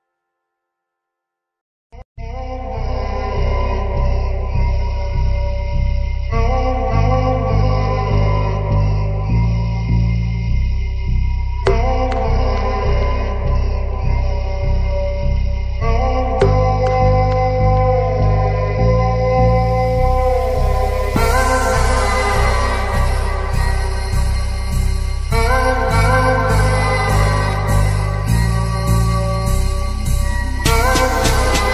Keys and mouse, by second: 0.4 click, 4.7 typing, 5.1-7.3 drag, 8.5-9.3 drag, 10.4-11.4 drag, 11.8 ctrl+click, 12.3 ctrl+s, 13.1-14.4 middle drag, 17.3 shift+drag, 17.4 shift+middle click, 17.5 shift+click, 17.9 middle click, 19.6-20.2 middle drag, 22.1 middle click, 23.2 middle click, 23.8 middle click, 24.4 middle click, 28.5 click, 30.6-31.7 typing.